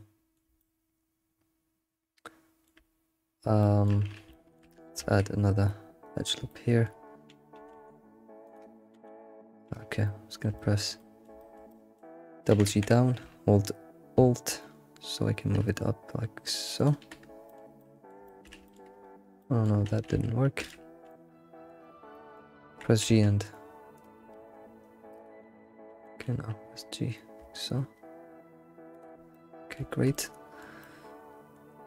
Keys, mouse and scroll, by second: 4.0 scroll up 1, 5.0 ctrl+r, 6.0 ctrl+r, 6.5 shift+middle click, 7.4 scroll up 2, 8.0 g, 9.1 g, 10.5-12.5 middle drag, 12.8 g, 17.8 middle click, 19.1 scroll up 6, 19.4 middle click, 20.1 ctrl+z, 21.1 middle click, 21.7 ctrl+z, 21.9 scroll down 1, 22.1 middle click, 22.6 g, 25.1 click, 25.9 g, 29.2 scroll down 1, 29.3-31.8 middle drag.